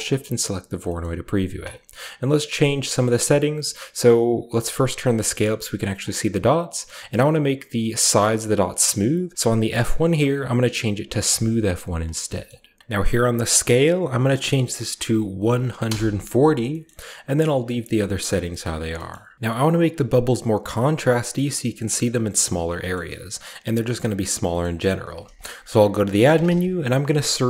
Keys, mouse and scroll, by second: 0.7-2.8 scroll up 1, 0.9 middle click, 1.3-2.9 drag, 1.8-2.6 typing, 2.8-4.6 scroll up 1, 2.9 middle click, 3.7-5.9 middle drag, 4.6-8.7 drag, 4.6-5.9 scroll up 1, 6.7-8.7 scroll up 1, 6.8-8.7 middle drag, 9.4 click, 11.2 click, 11.7 click, 12.2 middle click, 12.4-14.4 scroll up 1, 13.2 click, 14.4-15.2 typing, 14.6 click, 15.6 Return, 16.6-17.3 middle drag, 16.6-17.2 scroll up 1, 17.2-18.0 scroll up 1, 17.4-18.1 middle drag, 18.0-19.3 scroll down 2, 18.4 middle click, 18.9 middle click, 19.0 a, 22.7-24.3 middle drag, 24.4 middle click, 24.8-26.2 typing, 25.1 shift+click.